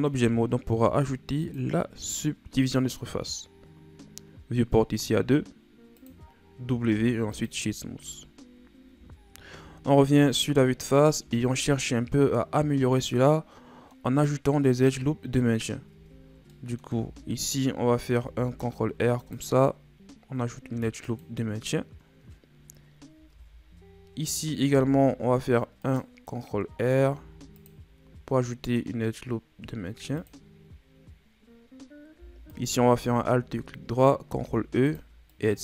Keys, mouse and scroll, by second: 1.4-4.5 drag, 5.0-6.9 drag, 6.9 w, 8.9 KP_1, 9.9-10.3 scroll down 7, 10.3-11.2 scroll up 7, 11.2 Tab, 11.9-13.0 scroll up 2, 13.0-13.3 scroll down 1, 13.3 middle click, 14.2-15.9 scroll up 2, 15.9 Tab, 16.5 middle click, 16.9 Tab, 18.2 ctrl+r, 23.3 ctrl+Tab, 24.7 ctrl+r, 26.1-27.2 scroll down 5, 27.2 ctrl+r, 30.5-32.5 scroll up 7, 32.5 alt+right click, 34.3 ctrl+e.